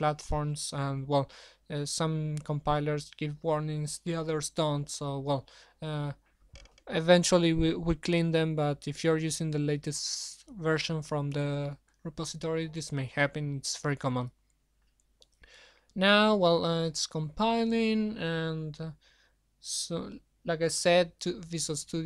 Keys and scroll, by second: 13.9 ctrl+shift+Escape.